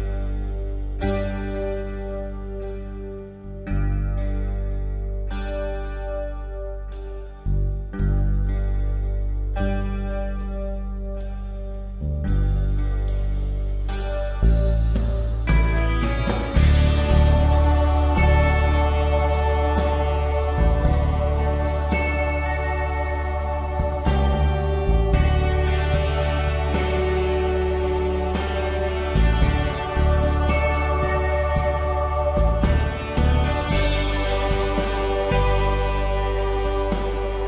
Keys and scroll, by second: 10.4 ctrl+alt+g, 23.9-25.0 typing, 26.6 ], 30.1 ctrl+z, 33.4-33.8 typing.